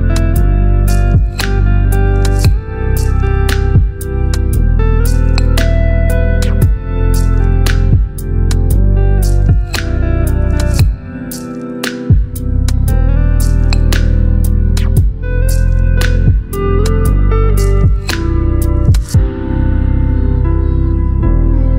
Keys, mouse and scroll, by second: 1.5 ctrl+Return, 1.6 ctrl+click, 3.7 click, 8.5 click, 11.3 click, 13.4 right click, 14.4 click, 17.0-21.7 drag.